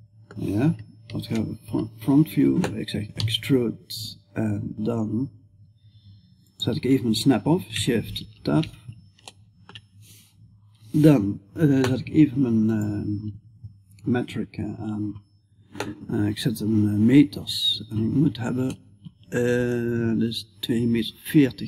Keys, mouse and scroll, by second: 1.1 KP_1, 2.6 e, 8.8-21.6 middle drag.